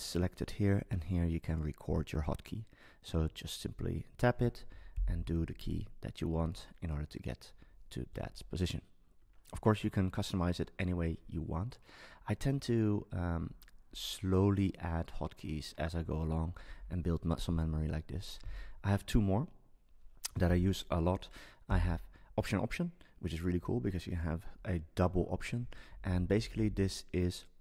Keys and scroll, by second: 4.9 alt+Left, 25.9 Down.